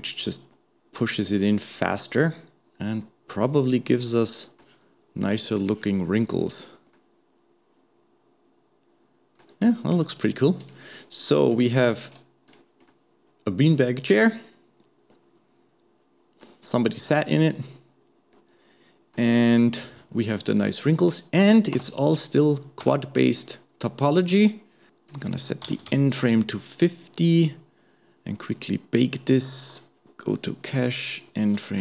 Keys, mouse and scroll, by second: 3.6 click, 4.1-5.6 middle drag, 5.6 click, 6.1 middle click, 6.5-6.9 scroll up 1, 6.9-10.1 middle drag, 10.1 right click, 11.0 middle click, 11.7 click, 12.9-15.9 middle drag, 17.1-20.1 middle drag, 20.6-21.0 scroll up 2, 21.0 middle click, 21.8 Tab, 23.1 Tab, 24.3-27.4 drag, 28.4-30.3 middle drag, 30.3-31.8 drag.